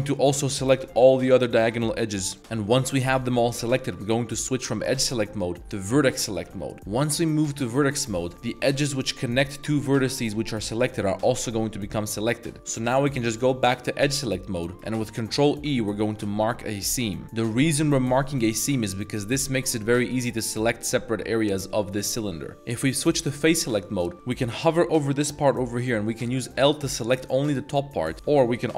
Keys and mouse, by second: 0.1 middle click, 0.7 alt+shift+click, 0.9 middle drag, 1.6 alt+shift+click, 1.8 middle drag, 2.3 alt+shift+drag, 2.4 middle drag, 2.4 z, 6.4 z, 6.7 middle click, 7.4 1, 14.0 2, 14.6 middle drag, 15.0 ctrl+e, 20.5-21.3 drag, 21.3 middle drag, 21.8 middle drag, 23.8 middle click, 24.1 a, 26.6 l, 27.4-27.7 middle drag, 28.1 a.